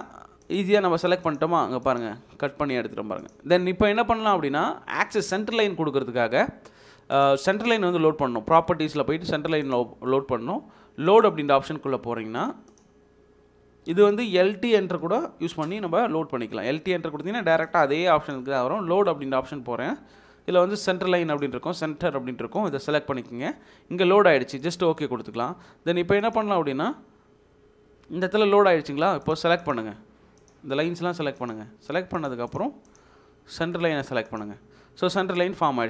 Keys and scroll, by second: 3.6 Escape, 15.0-15.6 typing, 35.3 Escape.